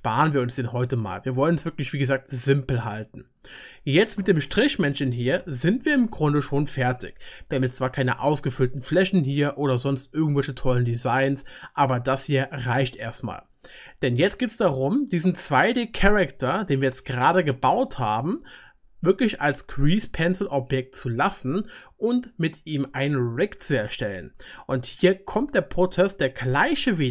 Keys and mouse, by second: 1.0 typing, 3.9-5.9 drag, 3.9-5.9 middle drag, 3.9-5.9 right drag, 5.9 typing, 10.5-12.5 middle drag, 13.8-27.1 drag, 13.8-27.1 middle drag, 13.8-27.1 right drag.